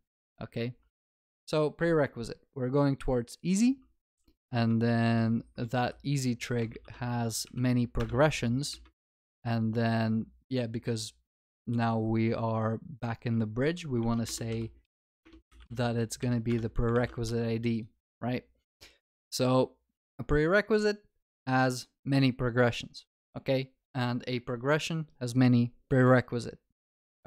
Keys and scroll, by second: 5.0 ctrl+BackSpace, 13.6 ctrl+w, 16.5 Return, 17.0 ctrl+s.